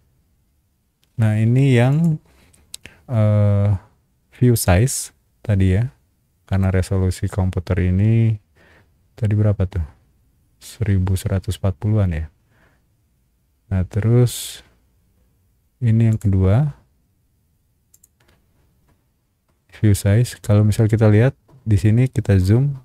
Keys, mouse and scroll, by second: 1.9 click, 14.3 click, 16.1 click, 17.9 click, 20.3-21.0 scroll up 3, 22.0 scroll up 1.